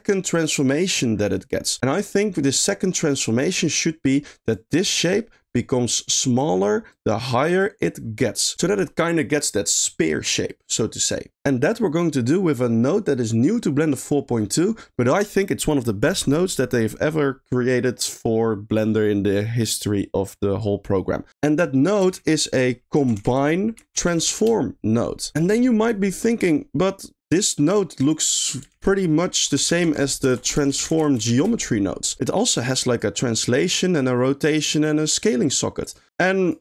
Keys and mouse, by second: 4.5 click, 5.5 click, 6.9 click, 21.4 middle click, 22.1 shift+a, 27.4 click, 28.0 click, 28.7 shift+a, 30.3 BackSpace, 30.4 BackSpace, 32.8 click, 32.9 click, 34.0 middle drag, 35.5 middle click, 35.8 click, 36.2 click.